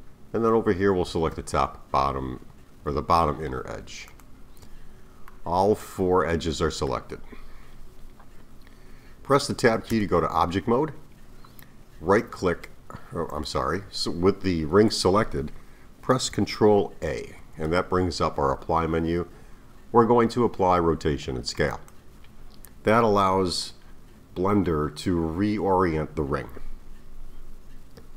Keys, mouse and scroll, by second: 4.1 alt+shift+click, 5.3-8.3 middle drag, 9.9 Tab, 12.2-13.3 right drag, 13.3 click, 17.4 ctrl+a.